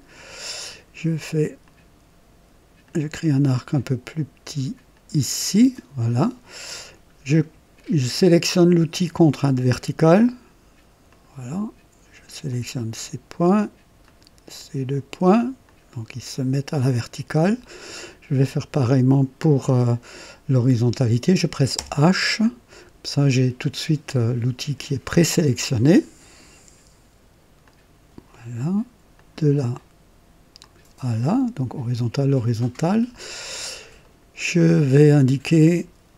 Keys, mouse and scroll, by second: 1.6 click, 2.8 click, 4.8 click, 5.7 right click, 9.3 click, 11.0 click, 12.4 click, 14.0 click, 15.6 click, 17.0 scroll up 1, 17.6 right click, 21.7 h, 21.9 h, 25.8 click, 27.6 click, 29.1 click, 30.5 click, 33.9 right click, 35.6 click.